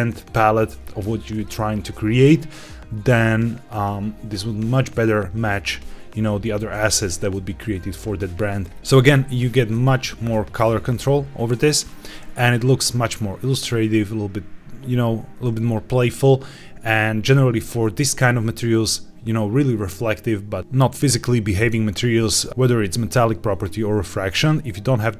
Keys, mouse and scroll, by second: 12.4-15.5 scroll down 1.